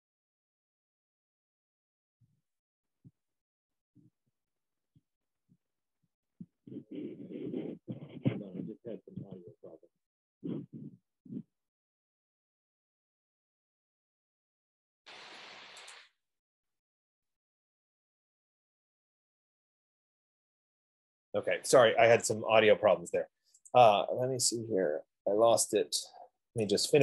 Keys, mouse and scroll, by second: 0.3-2.7 scroll, 3.3-3.9 scroll, 4.8-5.7 scroll, 23.0 F15, 24.0 click, 25.0-25.8 scroll, 25.8 middle click, 25.9 middle click, 26.1 middle click.